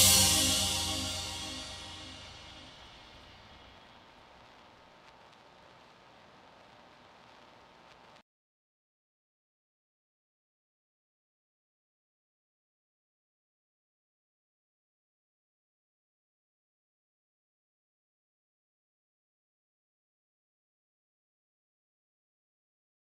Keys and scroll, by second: 0.0-1.5 typing.